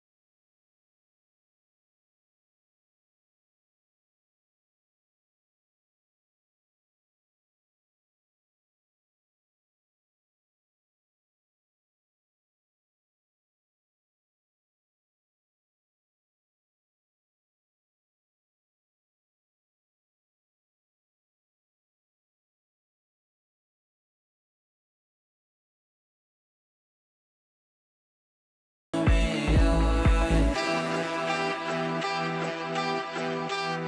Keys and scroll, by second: 1.2 Delete, 8.9 shift+Page_Up, 17.7 g.